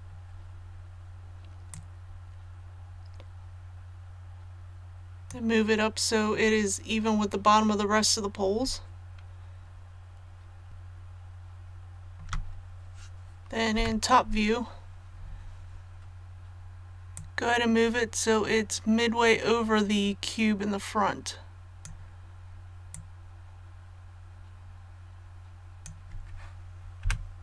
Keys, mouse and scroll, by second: 1.7-5.9 drag, 10.7-12.1 shift+middle drag, 13.7 KP_7, 17.1-26.0 drag, 27.0 KP_1.